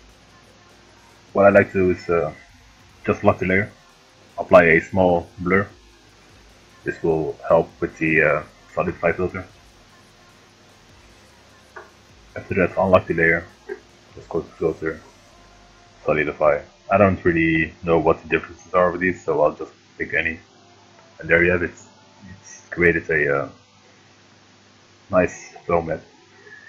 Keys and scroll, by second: 0.5 Right, 0.8 Down, 7.3 3, 11.1 ctrl+d, 24.2 space.